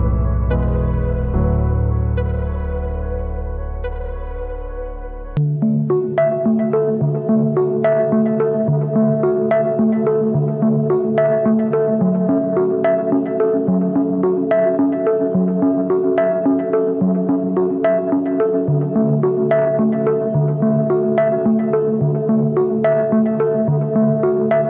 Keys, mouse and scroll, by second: 12.1 right click.